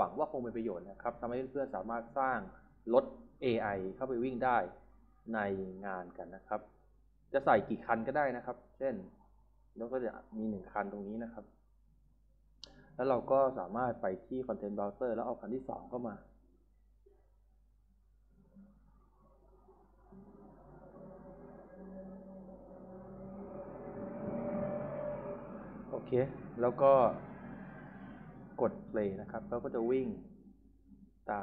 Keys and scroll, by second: 2.8 d, 17.2 e, 18.3 w, 21.5 d, 25.6 e, 27.6 w.